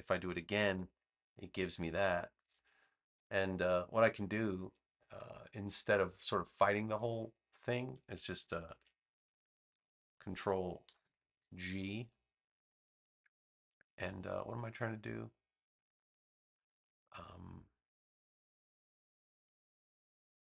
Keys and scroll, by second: 0.2 super+j, 9.6 super+g, 10.8 super+-.